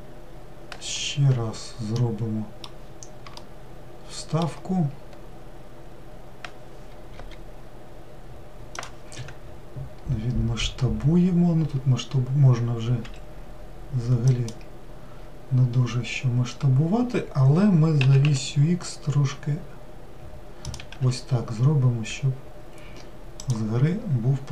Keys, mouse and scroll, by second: 0.0 scroll down 1, 1.7-6.3 middle drag, 23.6-24.5 scroll down 5.